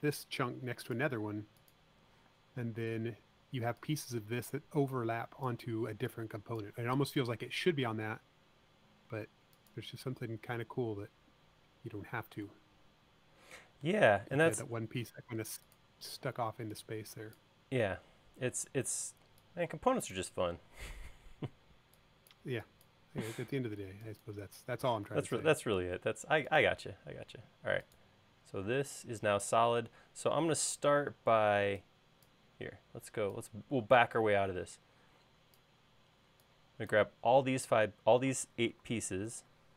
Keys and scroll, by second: 0.7 l, 3.1 p, 6.7 e, 9.9 l, 17.1 p, 21.6 e, 26.4 space.